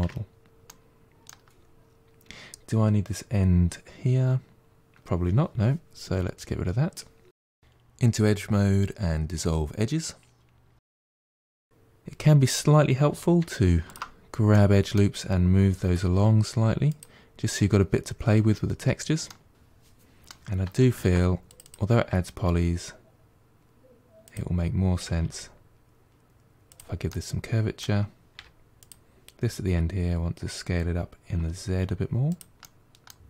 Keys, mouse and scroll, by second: 0.1-0.5 scroll up 2, 0.5-3.5 middle drag, 7.5 2, 8.8 Delete, 10.7-11.9 middle drag, 11.9-13.0 scroll up 2, 13.3 2, 13.7 alt+click, 14.4-15.5 middle drag, 15.5 g, 18.3-19.1 scroll down 7, 19.1 middle click, 20.9 ctrl+r, 22.3 g, 24.9 g, 26.9-28.2 middle drag, 28.2 3, 28.7 click, 29.5 s, 32.5 middle click.